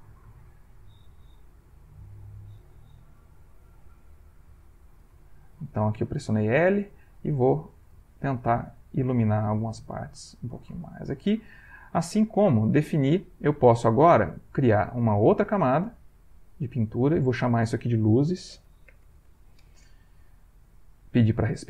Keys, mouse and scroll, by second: 0.4 ctrl+shift+click, 1.3-2.5 shift+drag, 3.0 l, 3.6 click, 4.0 click, 4.5 click, 5.0 click, 6.8-8.2 drag, 8.4-9.5 drag, 9.5 click, 10.7 click, 11.1 click, 11.5 middle click, 12.1-13.2 ctrl+middle drag, 16.2 click, 17.2 click, 18.1-19.4 typing, 21.3 click.